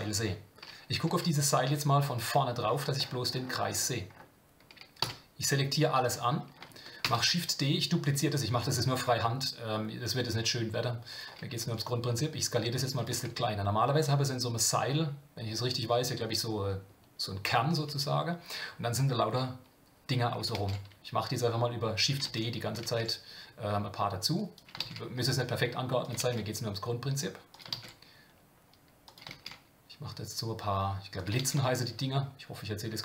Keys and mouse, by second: 1.0 KP_1, 1.6 KP_3, 7.0 shift+d, 13.1 g, 20.6 shift+d, 22.4 ctrl+shift+d.